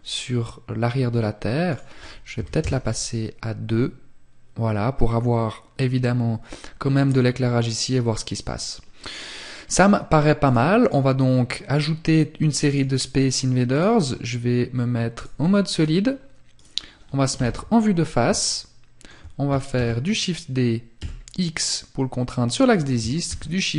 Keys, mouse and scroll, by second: 0.7 click, 9.5 click, 12.3 click, 14.8-15.7 scroll down 3, 15.7 right click, 16.4 KP_1, 17.5 shift+middle click, 21.6 click, 22.3 shift+d, 23.4 click.